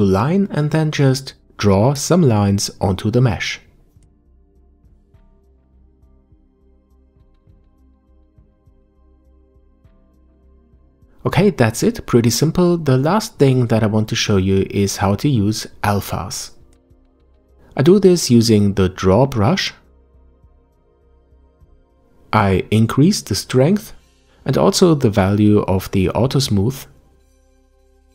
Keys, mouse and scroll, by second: 4.8-5.8 drag, 8.2-9.2 drag, 9.5 scroll down 2, 9.8-12.6 middle drag, 12.6-13.0 scroll down 1, 13.0 shift+middle click, 13.9-14.8 scroll up 1, 19.9-21.7 middle drag, 21.7-27.5 drag.